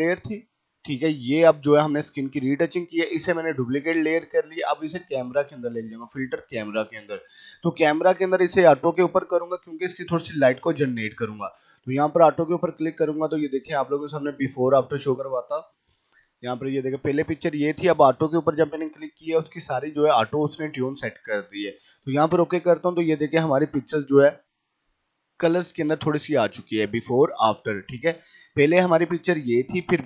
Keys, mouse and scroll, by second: 5.2 click, 12.1 click, 16.2 p, 19.8 p, 21.8 click, 22.3 click, 25.0 right click, 25.3 click.